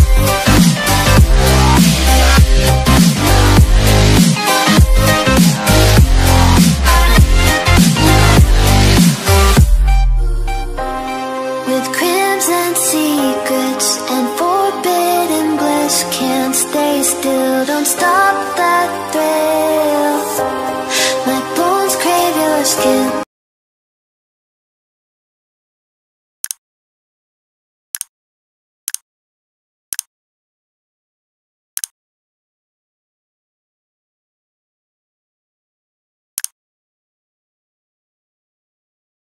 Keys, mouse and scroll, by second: 0.2 s, 1.4 click, 12.2 click, 15.7 click, 20.3 click, 21.0 v, 22.1 click.